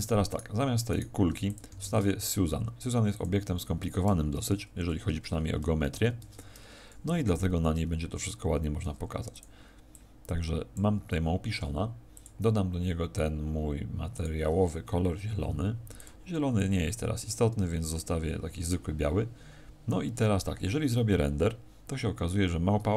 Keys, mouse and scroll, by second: 0.2 right click, 0.8 right click, 1.2 x, 1.8 shift+a, 5.8 ctrl+3, 7.0 r, 9.3 click, 9.8 click, 12.0 click, 15.9 click, 17.6-17.9 scroll down 6, 19.7 scroll down 4.